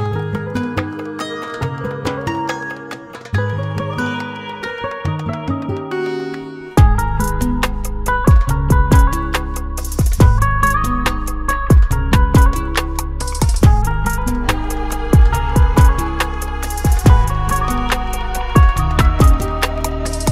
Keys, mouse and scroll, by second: 2.9 F4, 4.2 F9, 6.1 click, 7.3 ctrl+o, 8.7 click, 9.7-10.3 scroll down 1, 10.7-11.2 scroll down 1, 11.2 click, 12.0 click, 16.5 F4, 17.8 F9.